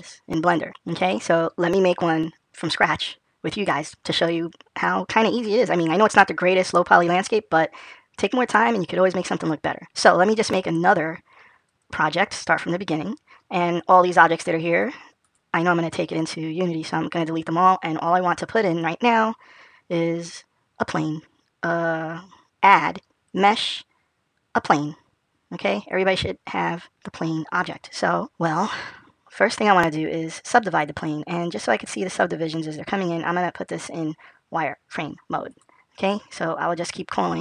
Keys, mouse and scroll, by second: 8.4 click, 10.1 click.